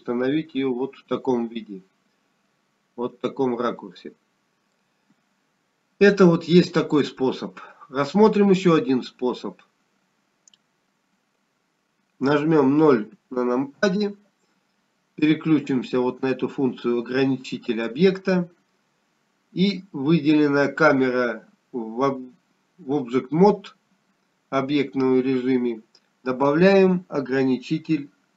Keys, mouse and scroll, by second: 3.2 scroll up 2, 4.6 middle click, 4.6 scroll down 1, 16.0 KP_0, 20.6 click.